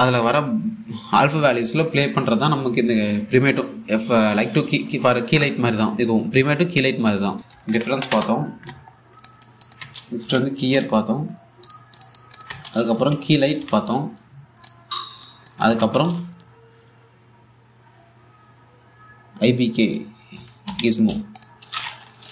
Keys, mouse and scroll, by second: 7.3 Tab, 7.4-8.7 typing, 8.8 Return, 9.5-9.8 scroll up 1, 9.9 alt+click, 10.4 Tab, 10.6-11.9 typing, 12.3 click, 13.2 Tab, 13.4-14.8 typing, 15.3 click, 16.4 Tab, 20.5-21.3 typing, 22.0 click.